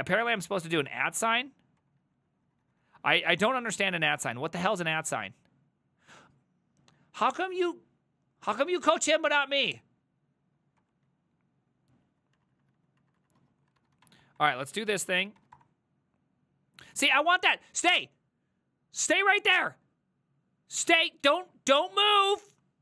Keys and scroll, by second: 0.3 typing, 0.9 Return, 1.8 Up, 2.0 ctrl+Left, 2.3 ctrl+Left, 2.5 ctrl+Left, 2.7 ctrl+Left, 3.0 ctrl+Left, 3.2 ctrl+Left, 3.9 BackSpace, 4.2 Return, 10.8 Up, 11.1 ctrl+Left, 11.8 ctrl+Left, 11.8-12.2 ctrl+Left, 12.4 ctrl+Right, 12.8 Left, 13.0 Right, 13.2 Right, 13.4-15.9 typing, 17.4-18.1 typing.